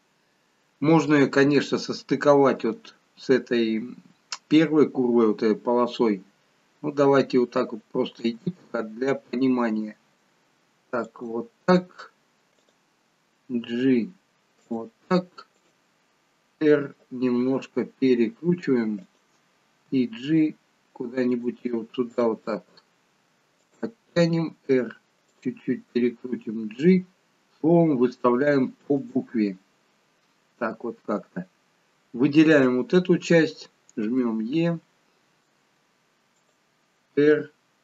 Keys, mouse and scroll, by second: 8.2 e, 12.5 click, 13.5 g, 15.5 click, 17.3 r, 19.9 g, 22.1 click, 22.5 g, 24.4 r, 26.3 g, 31.8 click, 34.0 e, 37.0 r.